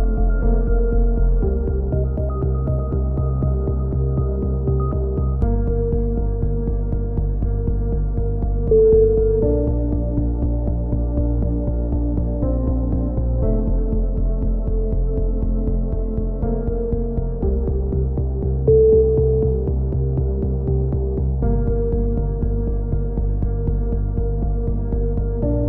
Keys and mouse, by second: 0.9 g, 2.6-4.0 drag, 4.0 middle click, 6.6 right click, 7.3 g, 9.6 right click, 9.8-11.0 drag, 11.0 middle click, 11.1 g, 12.7 click, 13.3 a, 13.6 middle click, 15.1 right click, 15.8-17.1 middle drag, 17.1-18.8 right drag, 18.8 click, 21.7 c, 22.3 right click, 23.1 middle click, 23.5 c, 23.6 click.